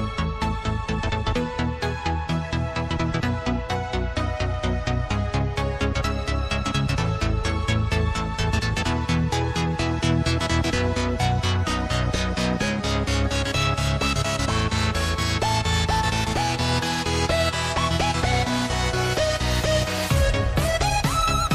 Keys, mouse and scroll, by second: 2.3 click, 3.0 Tab, 3.8 alt+click, 5.3 click, 6.1 alt+click, 7.5 alt+click, 9.0 alt+shift+click, 10.1 ctrl+b, 11.4 Tab, 12.2-12.8 scroll down 2, 12.8 Tab, 13.8 click, 14.9 click, 15.6 alt+click, 17.2 click, 17.8 click, 18.6 click, 19.1 Tab, 19.4-20.7 scroll down 2, 20.7 click, 21.2-21.5 scroll down 1.